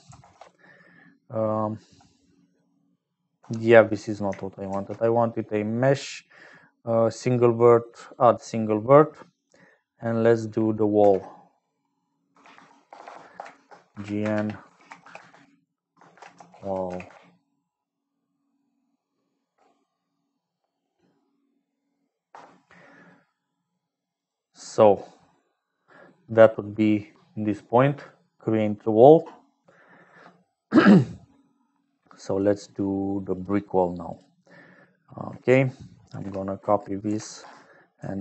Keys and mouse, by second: 3.7 x, 4.6 shift+a, 9.3 click, 9.9 click, 11.0 F2, 11.0 F3, 13.0 BackSpace, 32.3 click, 34.0 click, 36.1 F2.